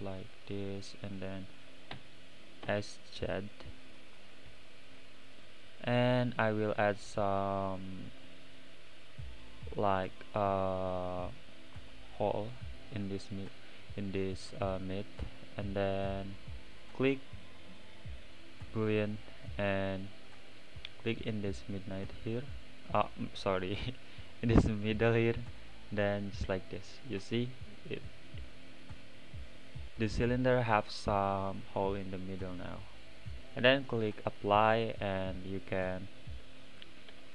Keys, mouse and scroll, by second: 0.8-1.9 middle drag, 1.9 s, 4.9 click, 7.0 click, 8.3-12.6 middle drag, 17.4-19.1 drag, 19.9 click, 26.2-27.0 middle drag, 27.0-27.5 scroll up 4, 27.5-30.5 middle drag, 30.6-32.0 middle drag, 32.0-33.3 right drag, 33.3-34.9 drag, 35.2 click, 35.7 click, 37.1 x.